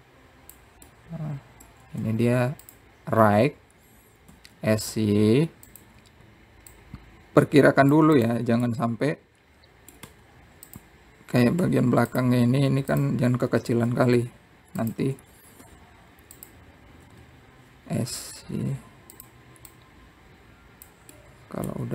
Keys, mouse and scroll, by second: 1.1 click, 2.7-3.8 middle drag, 6.2 s, 8.5 click, 10.0 click, 10.4-11.8 middle drag, 14.7 click, 15.2 s, 15.7 y, 16.6 click, 17.1 s, 18.8 s, 21.6 click.